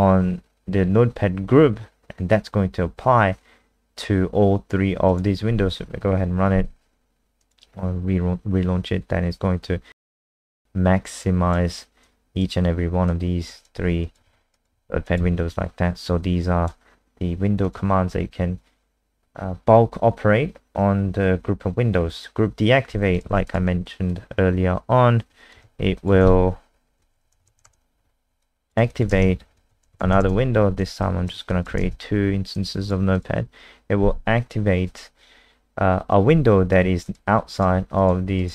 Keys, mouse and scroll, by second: 5.1 click, 5.7 F5, 7.4 click, 10.4 click, 11.0 click, 14.2 alt+F4, 14.5 click, 14.8 alt+F4, 15.0 click, 15.2 alt+F4, 16.2 click, 18.1-18.7 scroll down 3, 19.2-19.9 scroll down 1, 22.2 click, 23.3 ctrl+c, 23.4 click, 24.1 click, 25.6 ctrl+v, 25.9 click, 26.2 ctrl+s, 26.9-28.1 typing, 28.4 alt+click, 28.9 click, 29.1 ctrl+alt+space, 29.4-30.4 typing, 31.0 alt+click, 31.5 click, 31.8 ctrl+alt+space, 32.5 click, 38.1 click.